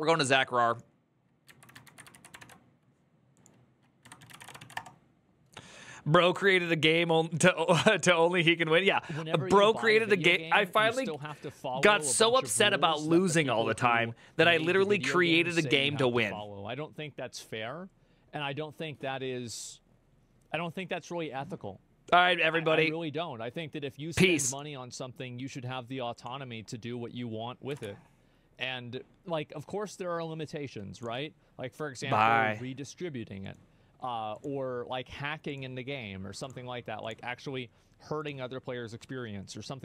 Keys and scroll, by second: 1.2 ctrl+Right, 1.6 ctrl+shift+Left, 1.9 ctrl+c, 2.2 alt+f, 3.5-4.6 typing, 27.6 alt+f.